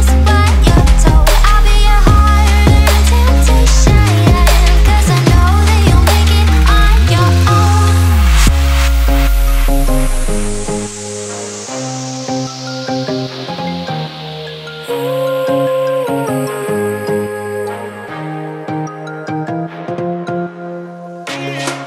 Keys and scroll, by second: 0.3 super+z, 1.8 super+s, 7.9 super+z, 8.5 super+z, 12.1 super+z, 12.8 super+s, 13.5 super+s, 13.9 super+z, 15.2 super+s, 16.2 super+s, 17.0 super+z, 17.6 super+z, 18.5 super+z, 18.7 super+z, 18.9 super+z, 19.9 super+s, 20.3 super+z, 21.7 super+z.